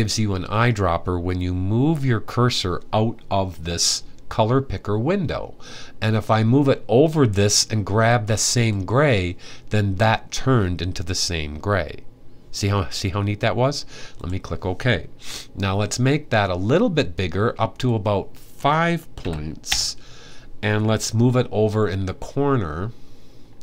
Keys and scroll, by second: 18.8 5.